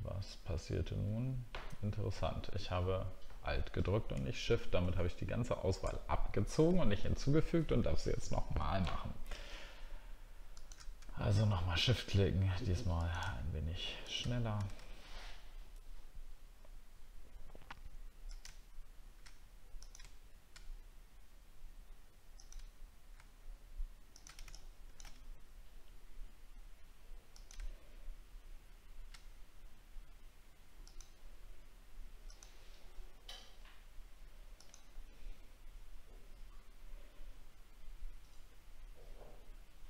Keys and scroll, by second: 4.1 alt+scroll up 1, 5.9 alt+scroll up 1.